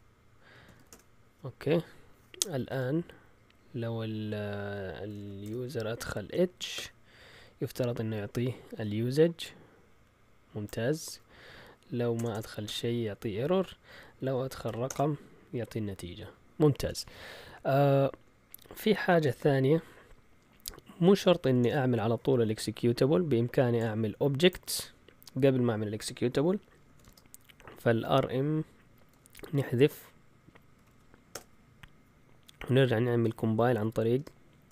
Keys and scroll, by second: 0.0-1.1 typing, 2.3-3.0 typing, 4.8-6.8 typing, 11.3 Up, 12.1 BackSpace, 12.3 BackSpace, 12.6 Return, 13.6 Up, 14.6 5, 14.8 Return, 19.2 ctrl+l, 21.1-21.9 typing, 26.6-27.4 typing, 28.8-31.3 typing, 33.0-34.7 typing.